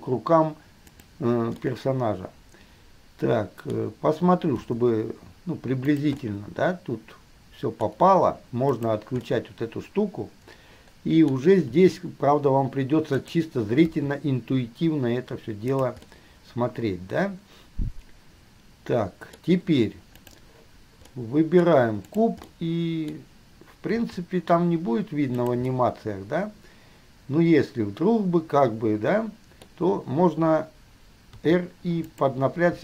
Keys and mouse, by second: 1.8-4.8 middle drag, 4.8 g, 6.0-6.5 middle drag, 7.9-8.9 middle drag, 9.0-9.4 middle drag, 11.2 middle click, 11.9 r, 14.0 g, 16.3-18.5 middle drag, 20.4 click, 20.5 middle click, 22.3 click, 22.4 middle click, 24.2-25.7 middle drag, 24.2 g, 26.0-31.7 middle drag, 31.7 r.